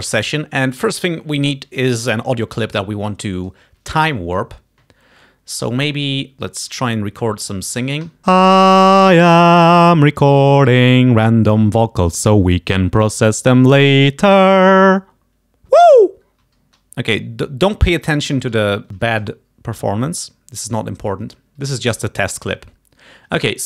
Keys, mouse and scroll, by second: 5.6 click, 6.4 click, 8.1 7, 16.5 space, 16.7 space, 17.2 click, 18.8 ctrl+scroll up 2, 18.9 ctrl+shift+s, 18.9 ctrl+shift+click, 18.9 ctrl+shift+right click, 19.2 ctrl+shift+click.